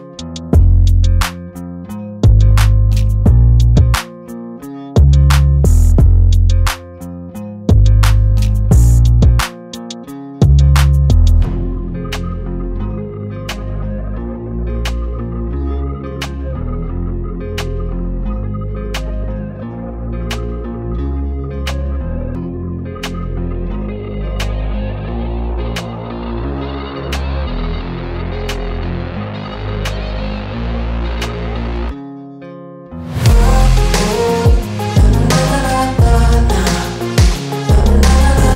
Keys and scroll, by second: 2.8 r, 6.2 ctrl+d, 6.8 v, 13.1 v, 15.0 i, 21.0 g, 28.7 v.